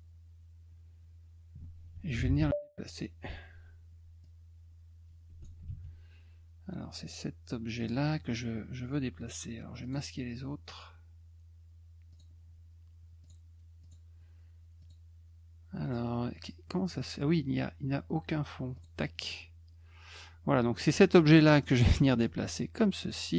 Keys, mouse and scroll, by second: 4.2-5.4 drag, 7.8 click, 9.8 click, 12.1 click, 13.2 click, 13.8 click, 14.8 click, 15.8 click, 16.3 click, 18.7 click, 20.8 middle click, 21.4 middle click, 22.1-23.1 drag.